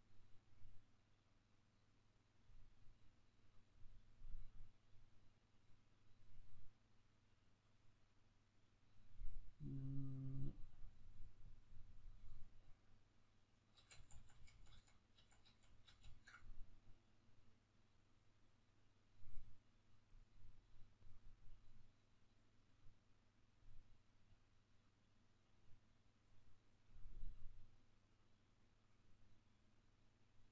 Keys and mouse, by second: 13.5 ctrl+z.